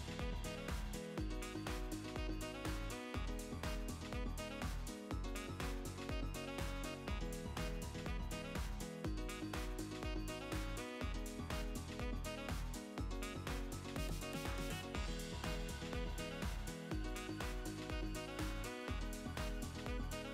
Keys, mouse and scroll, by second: 0.3 s, 1.9 Tab, 2.5 ctrl+r, 4.5 s, 6.8-8.2 middle drag, 8.2-9.4 drag, 8.7 Delete, 9.5 middle click, 10.1 click, 11.6 middle click, 12.3 click, 12.8 Delete, 13.3-17.0 middle drag, 13.7 KP_1, 15.5-17.8 drag, 17.0 s, 18.5 click, 19.4 s.